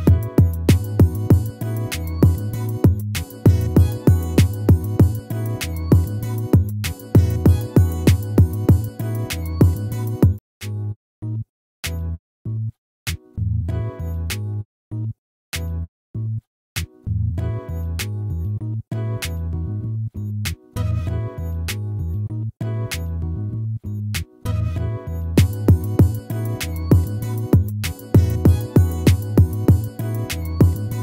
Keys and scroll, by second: 8.5 ctrl++, 27.4 ctrl+z.